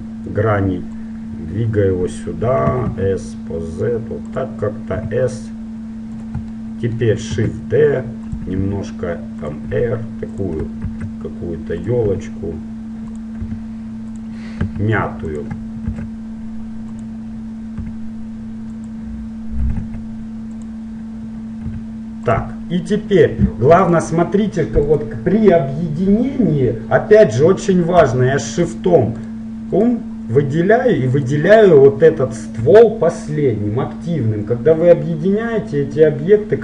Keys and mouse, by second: 1.1-2.9 drag, 2.9 s, 5.2 s, 6.7 middle click, 7.5 shift+d, 8.8 r, 9.9 s, 11.1 shift+d, 12.2 r, 13.7 g, 14.9 s, 16.1 shift+d, 18.0 s, 19.9 s, 21.9 r, 23.9-26.9 right drag, 28.7-33.1 right drag.